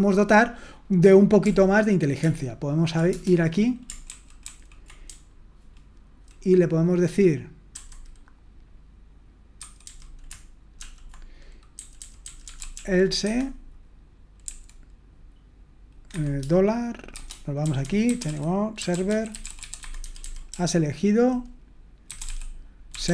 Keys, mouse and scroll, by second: 1.4 ctrl+p, 2.2 ctrl+p, 3.1 Return, 4.1 ctrl+d, 4.4 ctrl+d, 5.0-6.0 typing, 11.7-12.7 typing, 13.2 Escape, 16.8-23.1 typing.